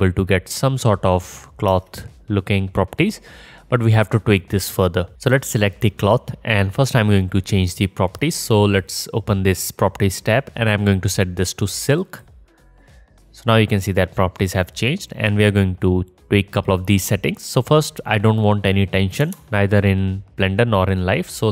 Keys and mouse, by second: 1.7 space, 5.1 click, 5.3-8.1 middle drag, 20.9-21.5 drag.